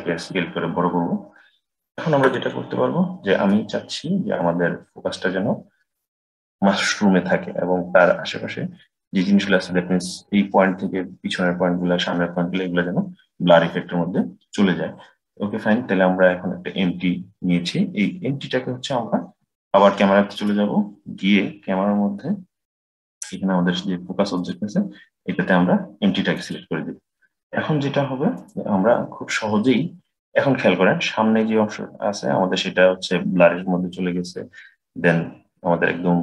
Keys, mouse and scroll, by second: 2.4-3.7 middle drag, 3.7-5.3 scroll up 3, 20.2 click, 24.2 click, 28.2 click.